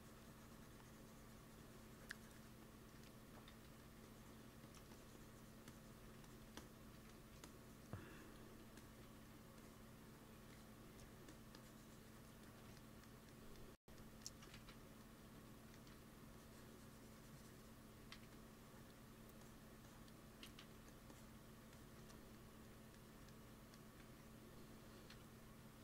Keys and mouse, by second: 3.4 x, 3.6 f, 3.9-6.3 drag, 4.5 f, 6.9 click, 6.9 f, 9.1 f, 12.7-14.2 drag, 14.4 shift+c, 15.2 f, 15.9 f, 16.2-18.1 drag, 17.9 x, 18.1 f, 18.5 click, 20.4 ctrl+z, 20.6 f, 22.0-23.5 drag, 23.9 ctrl+s, 25.1 KP_1.